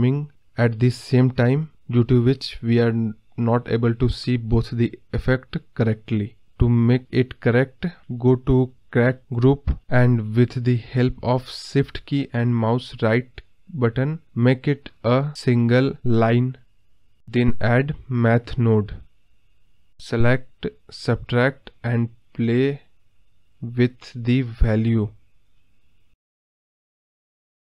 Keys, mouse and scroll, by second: 1.3-2.0 scroll up 6, 2.0-2.8 scroll down 2, 2.8 g, 6.8 middle click, 7.0 click, 13.9 shift+right click, 25.1-27.5 drag, 27.5-27.6 scroll down 3.